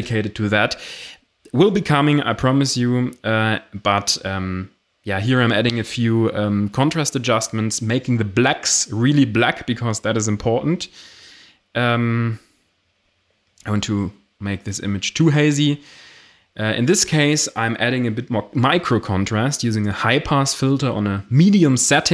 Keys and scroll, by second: 16.0 ctrl+alt+shift+e.